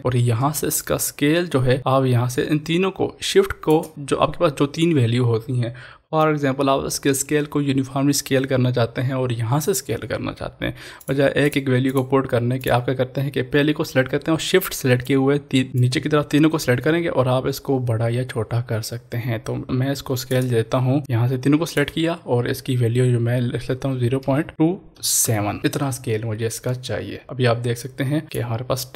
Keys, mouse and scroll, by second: 0.8-5.4 shift+drag, 11.1 click, 15.1 shift+click, 15.7 ctrl+z, 15.8-24.2 shift+drag, 27.2 click, 28.2 click.